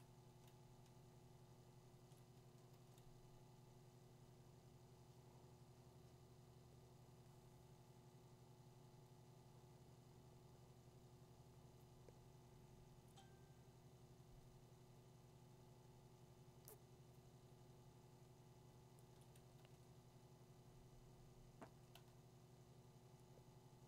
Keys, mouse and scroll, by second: 2.4-5.7 drag, 19.2 click, 19.6 2, 21.9 2, 23.2 ].